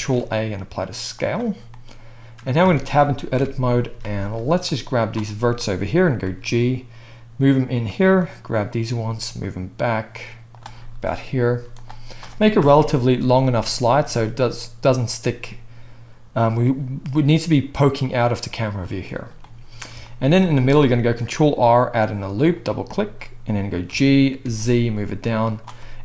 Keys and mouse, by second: 2.6 Tab, 3.4 KP_1, 3.9 z, 4.7-7.9 drag, 6.2 g, 7.9 middle click, 8.2-10.7 drag, 8.9 g, 10.7-24.9 middle drag, 11.5 z, 12.5 KP_0, 21.1 ctrl+r, 23.8 g.